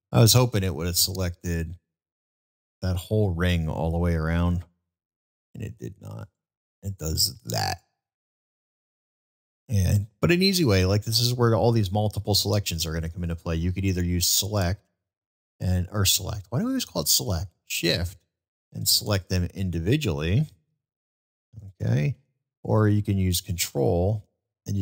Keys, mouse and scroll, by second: 0.2 click, 0.9 click, 7.7 alt+click, 8.7 alt+click, 16.1 shift+click, 18.0 shift+click, 19.4 shift+click, 19.9-20.3 shift+middle drag, 21.7 click, 22.2-22.6 middle drag.